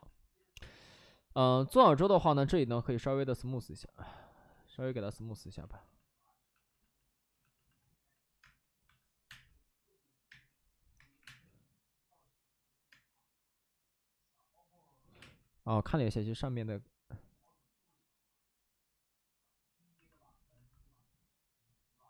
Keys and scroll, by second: 2.1 space, 8.3-11.1 typing, 12.8 space, 15.0 5, 15.1 space.